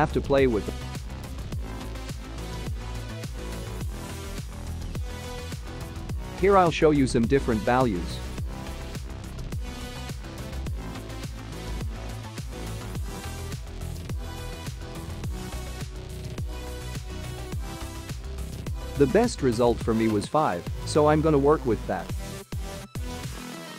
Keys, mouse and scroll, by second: 0.0 click, 1.0 click, 1.3-2.4 scroll down 14, 3.1 click.